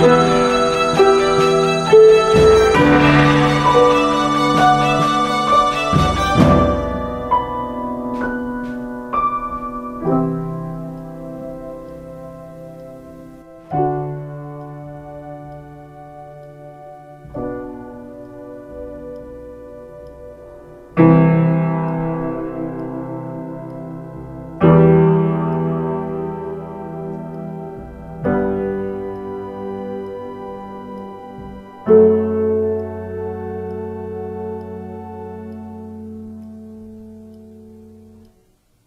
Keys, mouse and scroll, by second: 23.9 p, 25.7 ctrl+space.